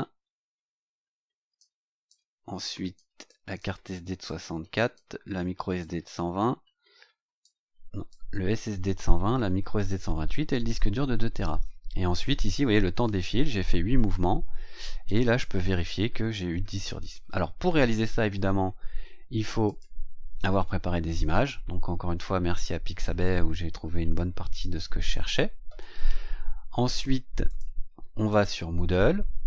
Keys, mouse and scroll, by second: 1.5 click, 2.9 click, 3.5 click, 4.9 click, 7.4 click, 15.0 click, 19.6 click, 27.4 click, 28.3 click.